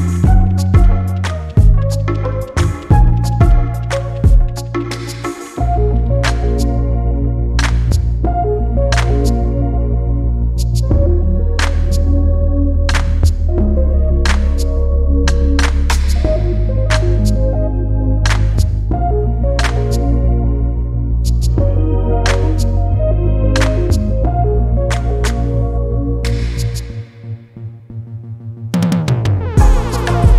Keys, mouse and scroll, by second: 0.2 click, 1.9 click, 7.5 click, 9.1 click, 12.2 space, 12.9 click, 14.4 click, 15.5 Down, 18.8 click, 19.7 shift+Up, 21.6 click, 22.2 click, 23.4 click, 27.2-28.3 ctrl+drag, 28.6-29.4 ctrl+drag, 29.5 ctrl+click.